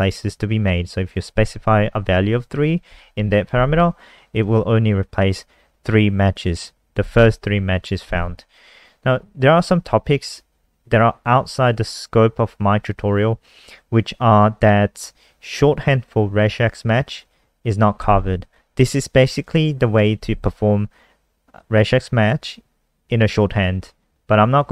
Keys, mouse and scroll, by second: 8.3-8.9 scroll down 1, 8.9 scroll down 1, 13.3 scroll down 1, 15.0 click, 23.8 scroll down 1.